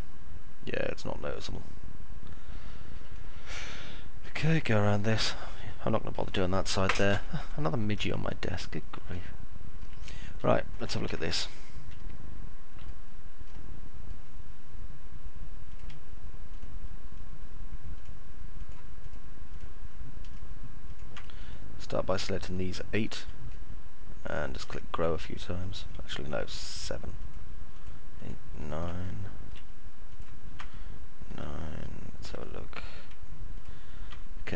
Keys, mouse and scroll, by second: 0.0-2.8 alt+middle drag, 3.6 alt+middle click, 4.3 middle click, 5.3 alt+middle click, 9.0 alt+middle click, 10.0 middle click, 10.3 alt+middle click, 10.8 F4, 12.0 alt+middle click, 16.3 ctrl+click, 19.3 ctrl+click, 20.1 ctrl+click, 20.8 ctrl+click, 21.3-23.0 alt+middle drag, 23.3-24.3 alt+middle drag, 29.0 alt+middle click, 30.6 alt+middle click, 31.8 alt+middle click, 32.3 middle click.